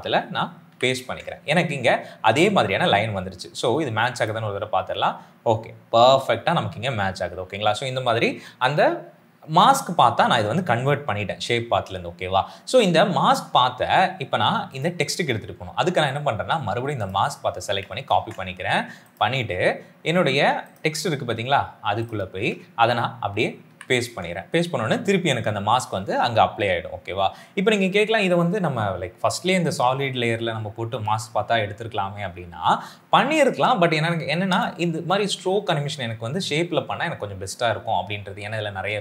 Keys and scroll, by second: 0.5 ctrl+v, 18.1 ctrl+c, 23.5 ctrl+v.